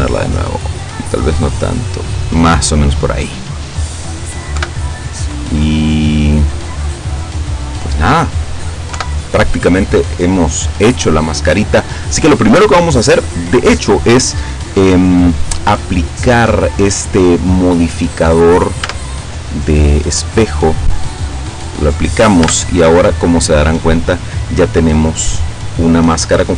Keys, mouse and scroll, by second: 0.7-1.1 scroll up 1, 1.8 scroll up 2, 3.3 middle click, 4.6 KP_7, 5.3-8.6 middle drag, 9.0 KP_7, 14.8 click, 15.3 click, 18.9 Tab, 21.5 click, 22.5 Tab.